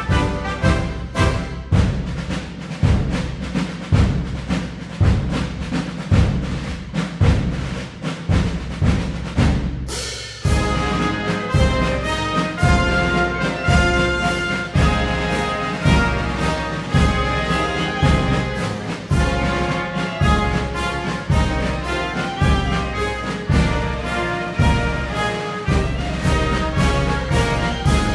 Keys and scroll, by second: 8.3-9.2 typing.